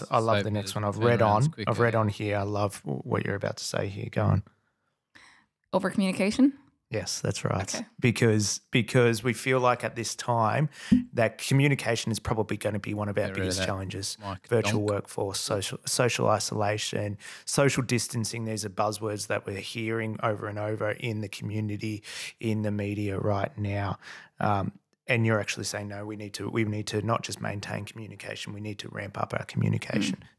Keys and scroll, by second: 2.4 g, 3.8 d, 5.4 F8.